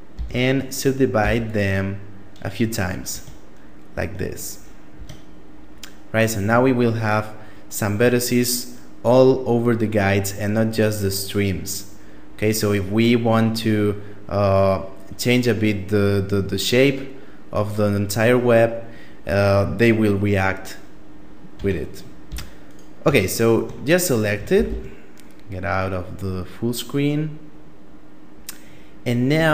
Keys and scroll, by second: 0.6 w, 2.5 Tab, 4.4 Tab, 20.9 Tab, 21.7 a, 24.1 shift+space.